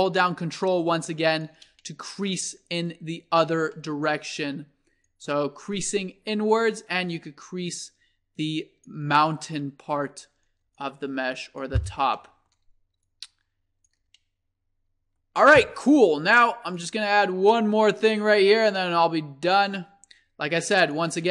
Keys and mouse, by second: 1.8-2.8 middle drag, 2.8-4.4 drag, 4.4-6.7 middle drag, 6.7-7.0 drag, 7.1-9.0 drag, 9.4 middle click, 10.8-12.1 drag, 12.1 middle click, 12.2 click, 13.1-14.7 middle drag, 16.7-18.2 drag.